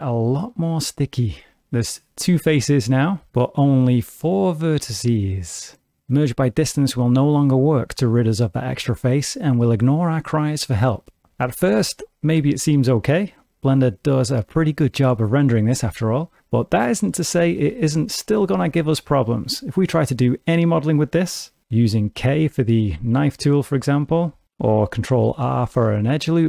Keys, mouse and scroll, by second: 0.0 middle click, 2.0 a, 6.0 middle click, 6.6 m, 12.0 middle click, 12.4 Tab, 12.9 middle click, 16.8 middle click, 17.3 Tab, 17.8 shift+middle click, 18.2 middle click, 18.6 alt+a, 22.1 k, 25.7 ctrl+r.